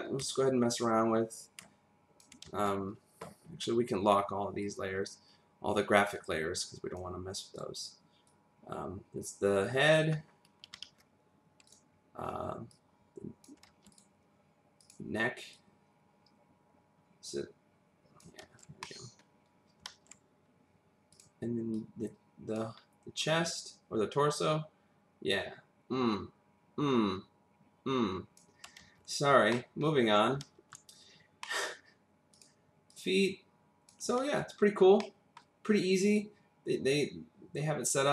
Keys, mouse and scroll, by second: 0.2 w, 0.7 click, 2.4 ctrl+z, 3.1 scroll down 2, 4.6 click, 7.5 click, 8.3 click, 10.8 ctrl+z, 11.7 click, 12.7 click, 13.7 ctrl+z, 13.9 click, 14.8 click, 15.5 click, 18.6 ctrl+z, 18.8 middle click, 19.9 ctrl+z, 21.1 click, 21.7 click, 22.8-23.7 scroll down 1, 23.7 click, 28.8 ctrl+z, 29.5 middle click, 30.4 ctrl+z, 31.4 middle click, 32.3 click, 32.9 click, 34.2 ctrl+z, 35.0 middle click.